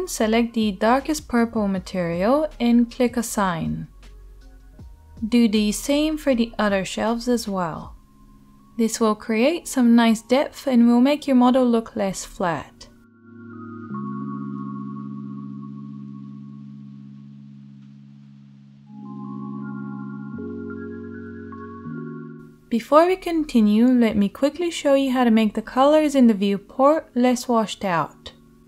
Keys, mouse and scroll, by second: 0.8 middle click, 0.9-2.1 right drag, 2.1-6.4 middle drag, 6.4 shift+right click, 7.0 shift+middle click, 7.1-8.8 shift+right drag, 8.8 shift+middle click, 9.4-10.8 right drag, 10.8-11.8 shift+middle drag, 11.8-13.4 right drag, 13.4-28.6 drag, 17.3 middle click, 17.3 right click, 18.4-21.7 middle drag, 18.4-21.7 right drag, 20.8 Tab.